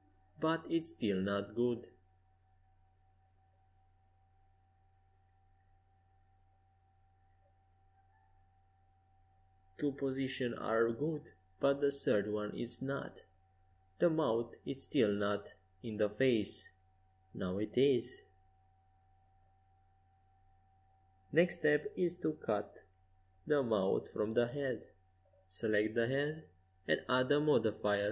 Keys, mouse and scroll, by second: 12.8 Tab, 14.2 z, 15.6 middle click, 17.7-19.3 drag, 19.3-21.1 middle drag, 21.4 middle click, 22.0 KP_5, 23.3-25.6 middle drag, 27.7-28.1 drag.